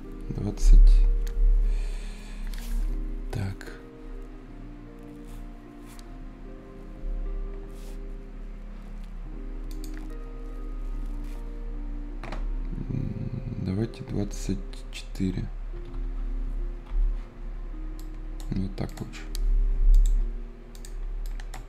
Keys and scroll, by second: 15.4-16.4 typing, 16.8 Return, 21.6 Escape.